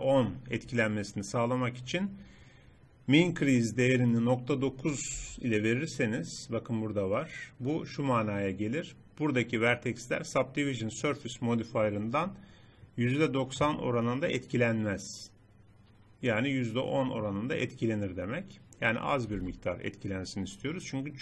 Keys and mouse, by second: 5.2 n, 19.4 n.